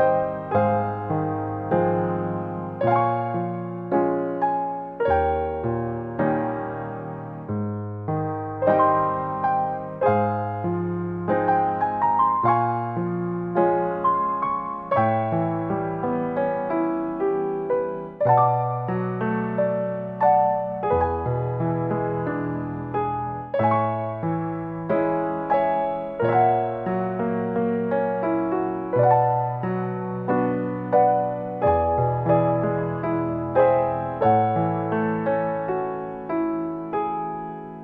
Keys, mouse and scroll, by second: 0.0-0.4 scroll up 5, 1.9 shift+middle click, 5.1 middle click, 5.8-7.7 scroll down 4, 7.7 scroll down 1, 8.8 click, 11.9 shift+d, 17.3 click, 19.4 click, 20.9 click, 22.2 middle click, 23.4 click, 24.4 middle click, 25.8 click, 26.6 shift+d.